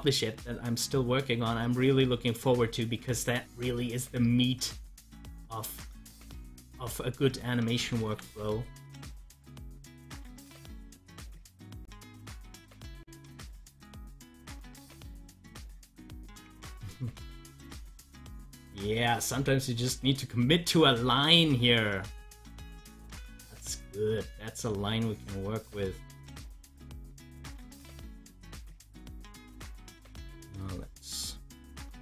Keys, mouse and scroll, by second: 6.4 ctrl+z, 8.0 ctrl+z, 10.1 ctrl+z, 12.6 ctrl+z, 16.6 z, 17.2-19.8 drag, 21.4-27.0 drag.